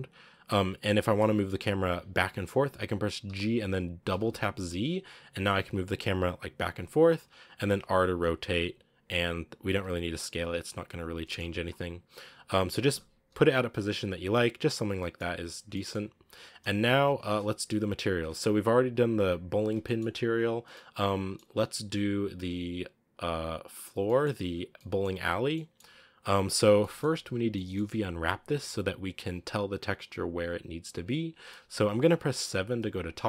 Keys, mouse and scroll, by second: 3.1 g, 8.3 r, 9.5 s, 11.0 scroll up 1, 11.1-12.4 shift+middle drag, 12.4 g, 13.6 g, 14.9-15.3 shift+middle drag, 15.3 scroll up 2, 15.6-16.0 shift+middle drag, 16.0 scroll up 2, 16.7 scroll down 2, 17.3 z, 17.8-18.7 scroll down 5, 18.7 right click, 18.9 scroll up 5, 19.9-21.4 shift+middle drag, 21.4-23.4 scroll down 1, 23.4 right click, 23.9-25.3 middle drag, 25.3 scroll up 1, 25.4-26.5 middle drag, 26.5 scroll down 2, 26.7-32.3 middle drag, 32.3 KP_7, 33.0 scroll up 1.